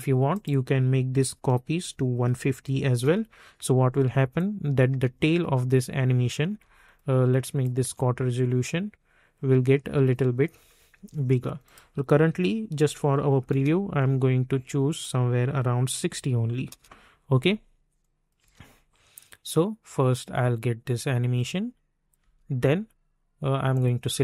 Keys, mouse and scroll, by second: 0.3 click, 1.8 1, 3.0 Return, 4.3 click, 4.9 space, 6.8 click, 7.8 space, 10.9 space, 11.6 click, 12.7 3, 13.5 Return, 15.0 click, 15.9 6, 16.7 Return, 18.0 click, 18.4 space, 22.1 space, 23.7 click.